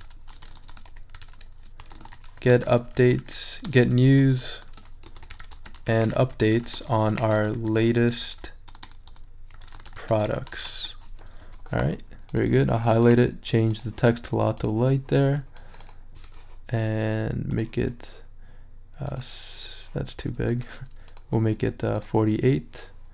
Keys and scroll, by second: 0.0-3.8 typing, 5.0-11.3 typing, 11.4 shift+super+a, 16.2 shift+super+a, 20.5 shift+super+z.